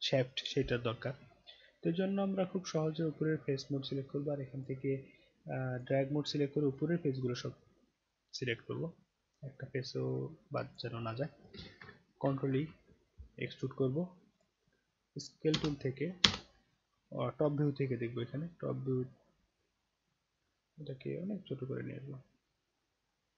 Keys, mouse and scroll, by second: 1.3-3.3 right drag, 4.6 click, 5.7 click, 6.8-10.8 drag, 12.3 ctrl+e, 14.4 click, 15.6 space, 16.2 space, 16.9 middle click, 17.5-17.8 alt+middle drag, 17.9 alt+right drag, 18.4-18.8 alt+middle drag, 18.9-19.2 alt+right drag, 19.5-19.8 alt+middle drag, 19.9 alt+middle click, 20.9-23.3 drag.